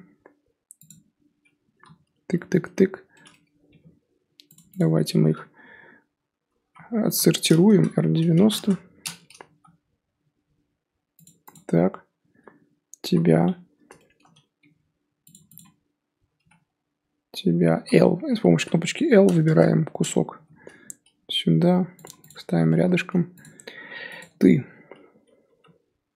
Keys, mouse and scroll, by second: 1.7 l, 2.0 l, 2.3 l, 2.6 l, 3.7 g, 4.8 click, 6.6 l, 7.0 l, 7.7 r, 9.5 g, 11.5 click, 13.0 l, 14.6 g, 15.5 click, 17.7 l, 18.5 r, 20.3 g, 22.3 click, 24.2 click, 25.4 l.